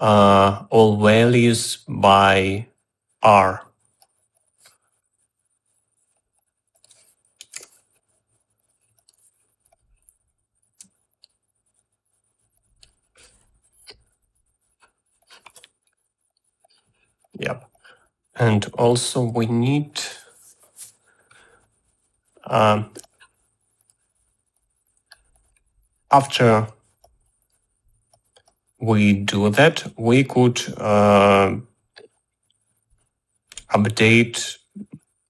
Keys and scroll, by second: 8.5 i, 11.5 space.